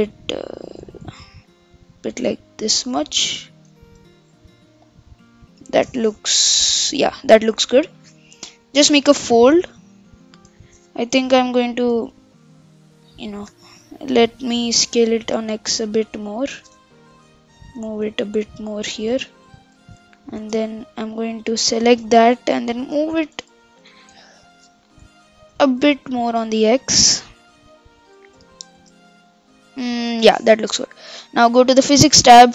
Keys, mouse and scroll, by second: 3.9 Tab, 4.2-6.3 middle drag, 6.3 KP_7, 7.0-11.1 middle drag, 11.1 KP_1, 11.4 Tab, 12.0 Tab, 13.0 middle click, 13.8 KP_7, 14.8 s, 17.8 g, 19.3 KP_1, 20.4 Tab, 21.5 middle click, 22.4 KP_1, 23.4 o, 23.8 g, 25.0 o, 25.5 g, 28.8 Tab, 29.1-31.8 middle drag, 31.8 click.